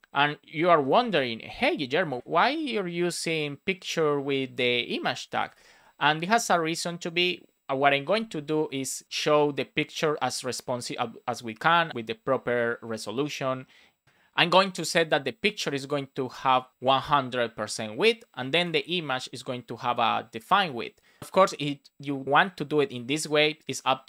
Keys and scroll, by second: 1.7 shift+[, 2.4 space, 5.2 Right, 5.5 space.